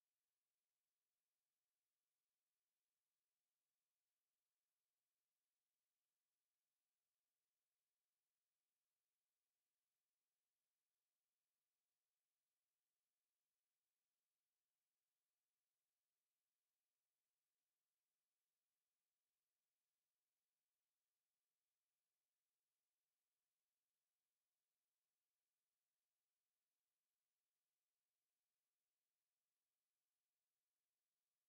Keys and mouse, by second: 20.5 click.